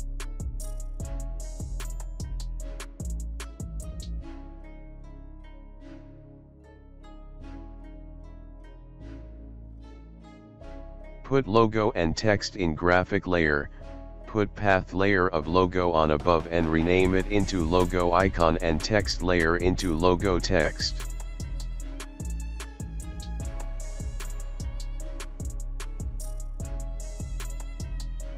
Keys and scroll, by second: 2.7 ctrl+b, 16.9-18.8 typing, 20.5-22.5 typing.